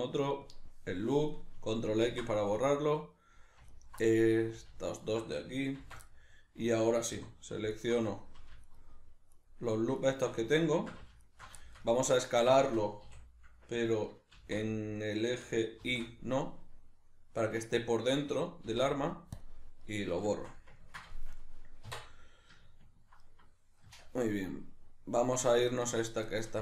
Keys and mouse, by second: 2.5-3.7 middle drag, 3.7 alt+right click, 4.1 middle click, 5.0 alt+shift+right click, 5.8 ctrl+x, 6.1-7.7 middle drag, 7.2 3, 7.7 alt+right click, 8.7 alt+shift+right click, 9.3 alt+shift+right click, 10.0 alt+shift+right click, 10.8 ctrl+z, 11.3 alt+shift+right click, 11.6-18.4 shift+middle drag, 13.1 s, 18.4 click, 18.6 x, 19.8-23.9 middle drag, 21.8 \, 23.9 Tab, 24.3 right click, 25.5 right click, 25.9 Tab, 26.3-26.6 shift+middle drag.